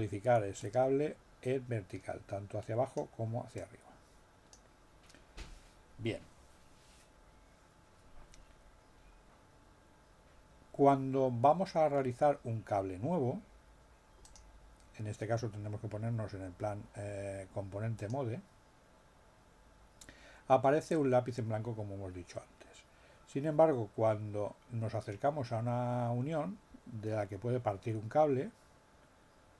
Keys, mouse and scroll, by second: 0.6-3.1 drag, 3.5 click, 14.2 click, 17.9 click.